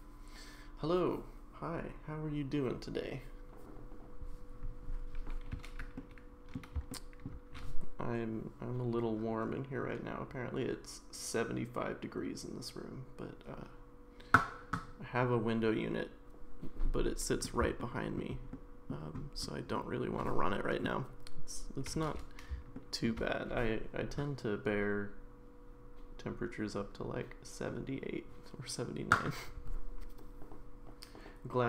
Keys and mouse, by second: 6.0-6.5 middle drag, 6.9-7.2 shift+middle drag, 17.1-17.4 middle drag, 17.8-18.2 shift+middle drag, 18.5-18.9 middle drag, 20.2-20.8 middle drag, 22.7-23.1 shift+middle drag.